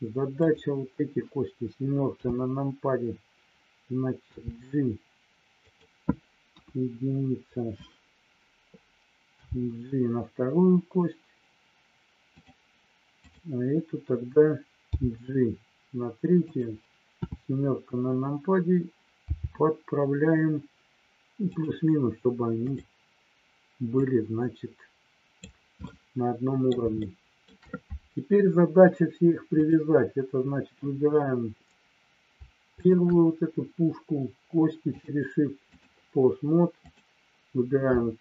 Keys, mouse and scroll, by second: 0.4 click, 2.0 KP_7, 4.4 g, 5.6 click, 6.5 KP_1, 13.2 click, 16.4 click, 17.2 KP_7, 19.3 g, 21.5 click, 22.6 click, 23.9-25.4 drag, 25.8-26.8 middle drag, 27.0 shift+middle click, 29.5-30.8 drag, 32.8 shift+click, 35.0 click, 36.8 click.